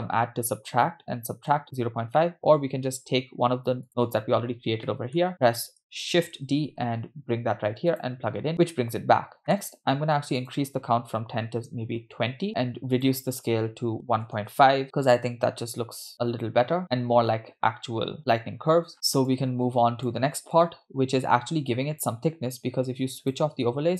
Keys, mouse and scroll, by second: 0.2 scroll down 2, 0.7 middle click, 1.8-2.2 scroll down 2, 2.2 middle click, 2.9-3.5 scroll up 3, 4.1 click, 4.7 scroll down 1, 4.9 middle click, 5.3 middle click, 5.3 scroll down 2, 6.7 shift+d, 9.1-10.4 scroll up 7, 9.4 middle click, 10.4-12.1 drag, 12.9 middle click, 13.0-14.5 drag, 14.8-18.4 middle drag, 18.9 middle click, 18.9-19.2 scroll down 2, 19.4-20.1 drag, 20.6-22.2 drag, 23.2 click.